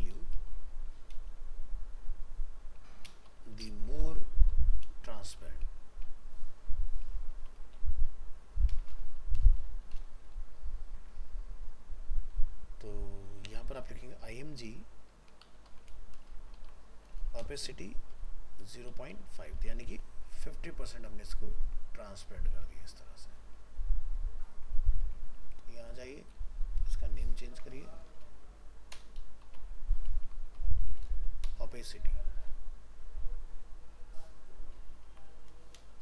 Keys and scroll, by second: 19.6 ctrl+s, 22.5 alt+f, 22.6 alt+移, 25.0 ctrl+Tab, 27.5 ctrl+shift+Left.